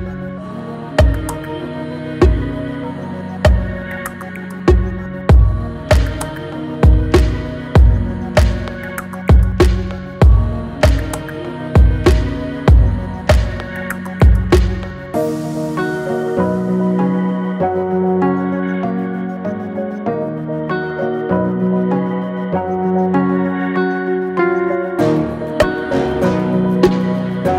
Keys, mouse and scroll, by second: 0.2-2.6 middle drag, 2.6 click, 3.3 click, 4.0 g, 5.4 click, 6.1 shift+click, 6.8 f, 9.1 click, 9.7 shift+click, 10.5 shift+click, 11.1 shift+click, 11.6 scroll down 1, 11.9-13.2 middle drag, 13.2 scroll up 1, 13.4 shift+middle click, 14.1 e, 16.9-18.0 middle drag, 18.0 e, 19.9-20.6 scroll down 2, 20.6 middle click, 21.0-21.8 scroll up 2, 21.8 g, 24.7 Tab, 24.9 click, 25.2 scroll down 1, 25.4-27.1 middle drag, 27.1 scroll down 2, 27.4-27.5 middle drag.